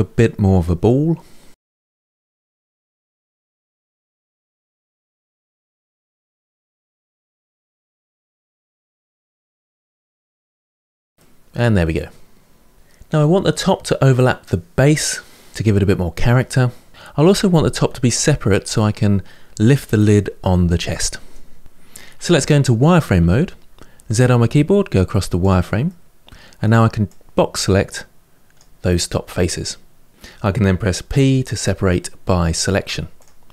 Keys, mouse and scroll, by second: 0.0 click, 0.1 g, 0.3 middle click, 0.4 ctrl+z, 0.5 middle click, 0.6 click, 0.8 g, 1.0 middle click, 1.8 2, 1.9 alt+click, 2.1 middle click, 2.2 s, 3.1 middle click, 4.1-6.7 typing, 4.2 click, 4.7 middle click, 5.7 shift+click, 5.8 middle click, 6.0 shift+click, 6.2 shift+click, 6.6 middle click, 6.9 middle click, 7.1 ctrl+z, 7.3 middle click, 9.1 middle click, 9.3 2, 9.4 alt+click, 9.4 middle click, 9.7 g, 10.1 middle click, 10.5 click, 10.7 g, 10.8 middle click, 11.0 Tab, 11.1-14.3 middle drag, 15.5-16.9 middle drag, 22.9 z, 25.6-26.8 middle drag, 26.8 click, 29.4-30.8 middle drag, 30.9 p.